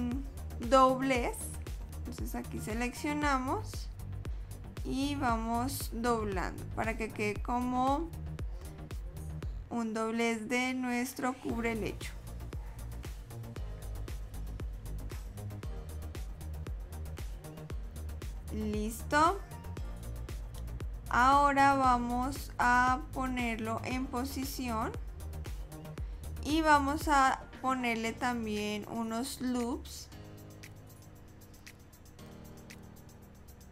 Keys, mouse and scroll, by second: 0.3 middle click, 1.5 click, 1.9 click, 3.2 click, 3.6 click, 4.4 click, 5.0 click, 6.0 click, 6.3 click, 7.4 click, 8.0 middle click, 8.7 ctrl+r, 10.2 click, 10.5 middle click, 11.2 e, 12.4 e, 13.2 middle click, 13.7 click, 14.1 click, 14.7 click, 15.3 click, 16.0 middle click, 17.6 click, 22.4 click, 25.6 middle click, 29.4 ctrl+r.